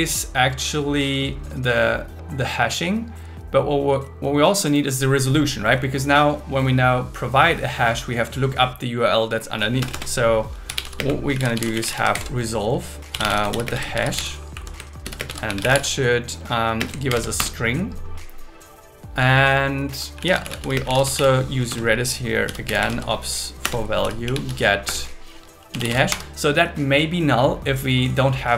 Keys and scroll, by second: 9.8 Return, 11.0 space, 12.1 shift+8, 13.6 shift+space, 13.7 shift+s, 14.5 Right, 15.2 shift+space, 15.3 shift+s, 16.8 space, 17.1 alt+8, 17.4 Return, 20.7 space, 21.0 space, 21.7 Return, 23.6 Return, 24.3 Return, 24.8 Return, 26.1 Escape.